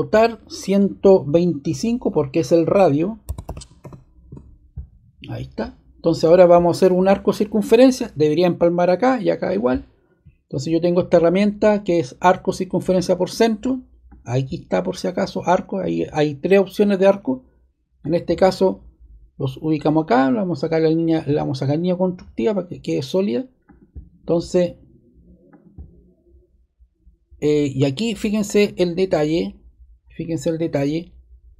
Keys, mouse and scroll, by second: 3.0-4.2 typing, 5.3 typing, 21.8-22.9 drag, 23.6-24.8 drag, 25.4 click.